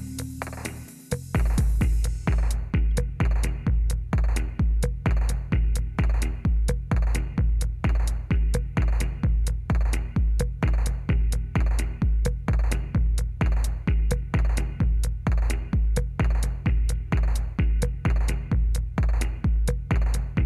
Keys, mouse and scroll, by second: 3.0 Up, 3.4 Up, 3.6 Up, 4.2 Down, 4.5 Down, 4.8 Down, 5.0 Down, 5.3 Down, 10.5 Down, 11.5 Down, 11.8 Down, 12.0 Down, 12.2 Down, 12.5 Down, 12.6 Down, 12.9 Down, 13.0 Down, 13.3 Down, 13.7 Down, 15.0 Down, 15.4 Down, 16.0 Down, 16.8 Up, 17.0 Up, 18.9 Down, 19.4 Down, 19.6 Down, 19.8 Down, 20.1 Down.